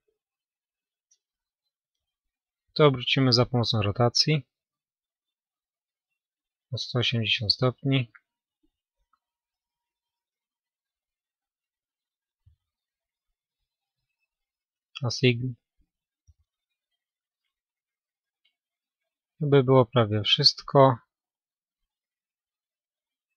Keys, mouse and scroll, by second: 1.5-5.0 drag, 5.0 r, 9.3-11.9 middle drag, 15.3-17.7 drag, 16.4 a, 17.7 a, 18.3-18.7 scroll down 1, 18.7-23.0 middle drag.